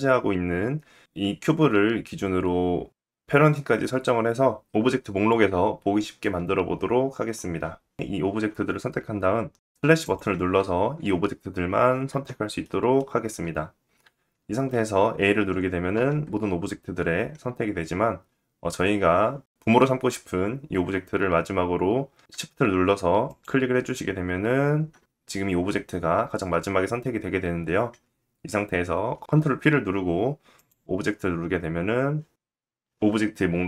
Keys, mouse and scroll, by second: 8.2 shift+click, 8.9 shift+click, 9.2 shift+click, 10.4 /, 11.0 click, 12.2-13.3 scroll down 1, 13.6 shift+middle click, 15.5 a, 22.8 shift+click, 29.1 ctrl+p.